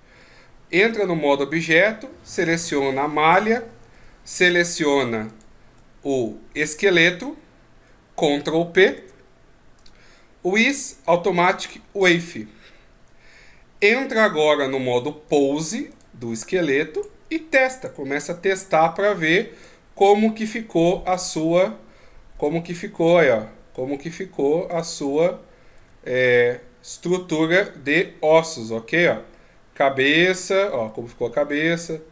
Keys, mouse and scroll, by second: 0.2 middle click, 5.3 shift+right click, 8.8 ctrl+p, 15.3 right click, 15.9 right click, 16.9 click, 18.5 middle click, 19.1 shift+scroll up 1, 20.0 middle click, 21.1 right click, 21.6 scroll up 1, 22.5-22.9 scroll up 2, 22.5 g, 24.7 right click, 25.8 g, 27.9 right click, 28.9 right click, 29.3 middle click, 30.8 g.